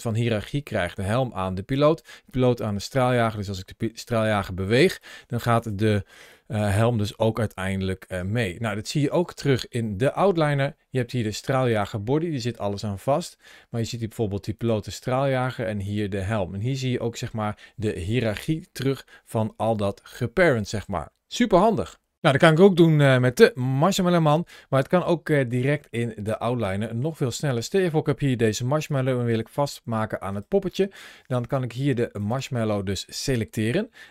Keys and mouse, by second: 6.4 g, 7.9 right click, 14.4 right click, 22.9 click, 23.6 g, 24.0 right click, 26.9 click, 27.5 click, 28.3 g, 28.7 right click, 29.7 g.